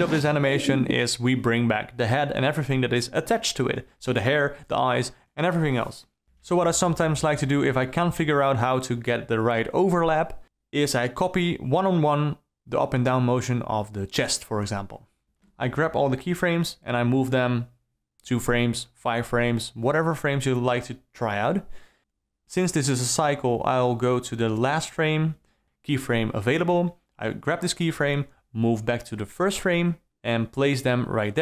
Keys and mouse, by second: 3.0 a, 3.9 d, 4.5 middle click, 5.3 KP_1, 6.2 middle click, 8.1-10.1 drag, 10.4 g, 14.4-16.2 drag, 18.6 i, 20.6 alt+a, 21.9 click, 22.3 c, 24.4 alt+a, 25.3 ctrl+z, 26.8 click, 27.6 shift+F12, 27.6 alt+a, 27.6 click, 28.0 g.